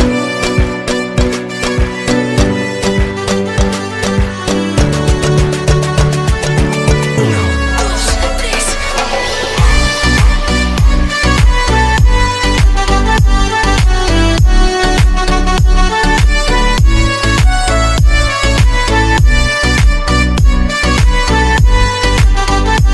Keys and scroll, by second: 1.1 Delete, 9.9 Delete.